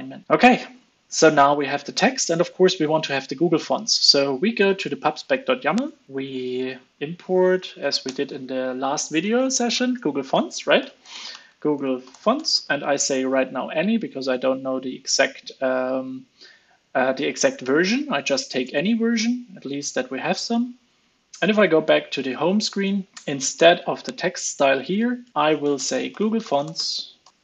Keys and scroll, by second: 7.8 super+Right, 13.4 super+s, 24.6 alt+Up, 24.8 alt+Up, 25.3 super+x.